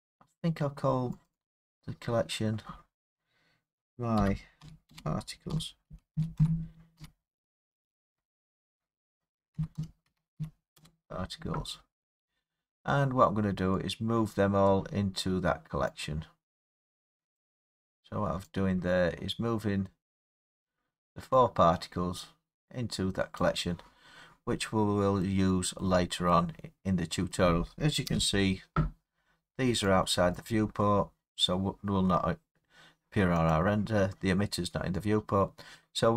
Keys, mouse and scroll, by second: 0.0 scroll, 0.1-1.3 scroll down 7, 1.3 click, 1.3 scroll, 1.5 click, 4.2-7.0 typing, 9.3-10.4 typing, 10.8 Return, 11.9 scroll, 12.7-14.7 scroll, 14.7 click, 17.3 click, 19.8 click, 20.3 middle click, 20.3 middle click, 20.4 middle click, 23.4 click, 25.4 scroll, 25.8-27.2 middle click, 25.9-26.3 scroll up 5, 27.3 middle click, 28.1 scroll, 28.1 0, 30.4 click, 32.5 scroll, 33.5 click.